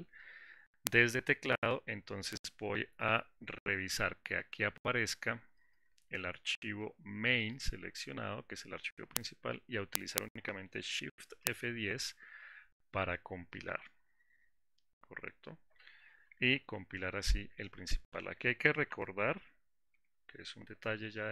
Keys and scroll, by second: 11.6 shift+F10, 19.5 alt+4.